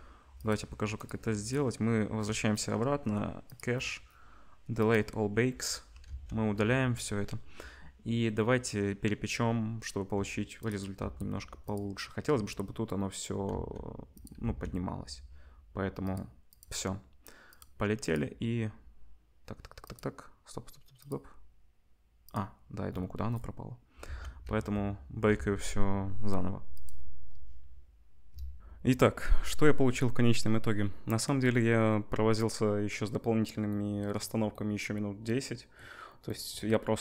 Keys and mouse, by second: 0.3 click, 1.4 click, 3.5-10.6 drag, 6.1 ctrl+s, 11.1 s, 13.6 s, 14.4 s, 16.0-17.6 drag, 18.0 click, 19.8 click, 22.2 click, 23.9-26.7 ctrl+middle drag, 24.1 ctrl+s, 24.4 z, 25.3 ctrl+s, 26.7-37.0 drag, 28.6 ctrl+shift+F1.